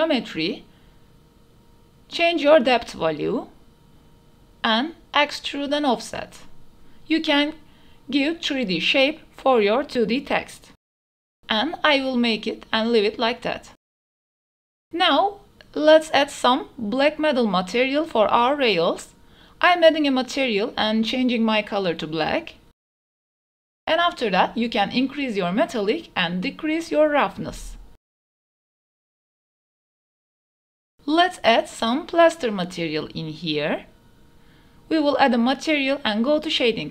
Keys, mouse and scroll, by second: 1.9 click, 2.2 click, 5.3 click, 7.3 click, 8.2 click, 9.4-11.9 drag, 12.3-12.7 middle drag, 13.8 ctrl+s, 14.5 click, 14.8 shift+click, 15.4 click, 15.8-17.3 drag, 17.3 shift+middle click, 17.7 click, 23.5 shift+middle drag, 24.0-24.4 shift+middle drag, 25.7 click, 27.6-30.4 drag, 30.7 shift+middle click, 30.8 shift+middle click, 31.3 click, 31.8 shift+drag, 33.2-34.9 drag.